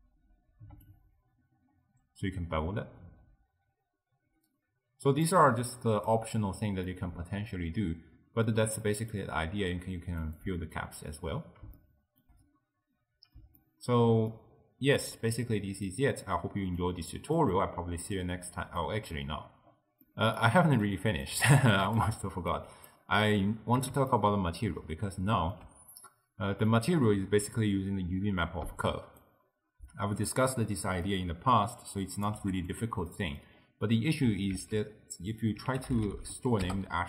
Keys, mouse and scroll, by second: 0.9-4.1 shift+drag, 5.8 click, 6.5-6.9 scroll down 2, 6.9-10.4 middle drag, 10.4 click, 11.2-11.8 scroll down 1, 11.8-12.5 shift+middle drag, 12.5-13.0 scroll down 3, 13.0-16.3 middle drag, 16.3-16.8 scroll down 1, 16.8 click, 17.5 middle click, 17.8-18.8 scroll down 5, 18.8 middle click, 19.4-20.1 scroll up 7, 20.1-20.9 middle drag, 20.9 click, 21.4 g, 22.0 click, 22.6 click, 24.1-26.7 ctrl+middle drag, 26.7 drag, 30.8 middle click, 31.3-31.8 scroll down 3, 31.8 click, 32.5 g, 33.1 middle click, 33.6-34.2 scroll up 2, 34.6 ctrl+a.